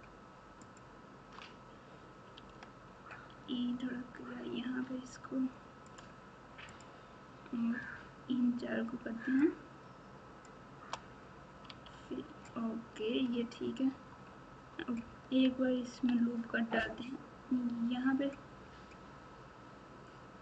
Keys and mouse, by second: 2.3 e, 6.7 click, 9.4-10.4 shift+drag, 11.6 f, 13.3 Tab, 13.8 Tab, 15.9 ctrl+r.